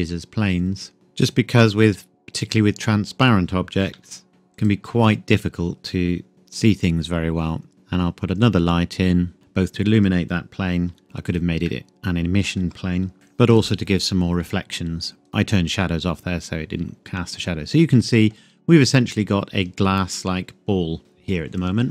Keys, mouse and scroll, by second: 1.3 click, 4.0 s, 4.6 click, 7.7 shift+a, 9.3 click, 10.9 g, 11.3 click, 11.7 middle click, 12.0 scroll down 1, 13.1 click, 15.3-16.1 scroll up 1, 17.1 middle click, 18.6-20.6 scroll up 1.